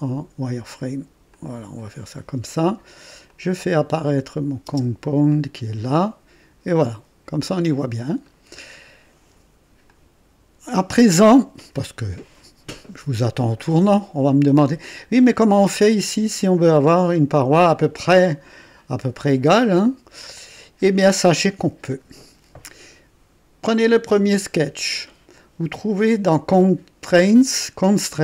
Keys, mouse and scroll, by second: 1.3 click, 1.8 click, 3.2 click, 4.3 click, 4.6 space, 5.3 click, 5.9-8.1 drag, 8.2 right click, 9.8 click, 13.6-15.4 drag, 15.5 right click, 18.2-21.2 drag, 21.3 right click, 23.7 click.